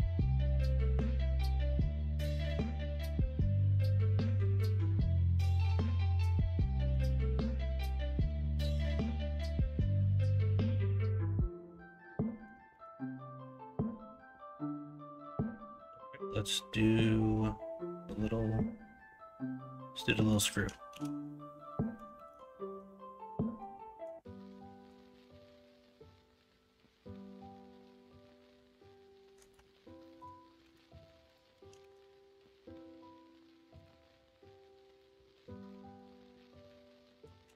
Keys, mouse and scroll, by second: 1.2 middle click, 2.1 middle click, 2.9 middle click, 3.5 shift+middle click, 4.3 middle click, 4.7 Tab, 5.1 middle drag, 6.2 middle click, 6.6 shift+middle drag, 7.5 KP_1, 7.8 KP_3, 8.1 alt+z, 10.8 middle drag, 12.2 middle drag, 12.7 shift+a, 20.1 middle drag, 20.9 shift+a, 30.0 middle drag, 30.6 shift+s, 31.7 shift+a, 34.9-35.9 middle drag.